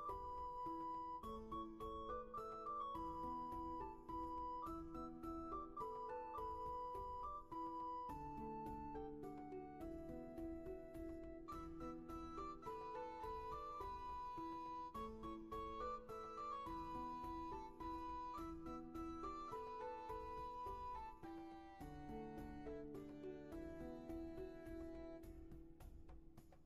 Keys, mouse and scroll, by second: 0.7 scroll down 1, 2.9 scroll up 1, 10.5-11.0 scroll down 1, 11.0 space, 12.8-13.2 scroll down 1, 13.2 space, 13.9-14.3 scroll up 1, 14.3 space, 18.3 ctrl+z, 26.2 ctrl+z.